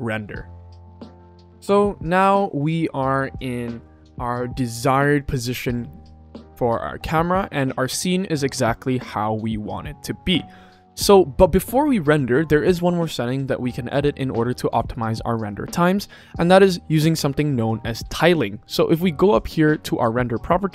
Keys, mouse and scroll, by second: 0.8 click, 15.3 click.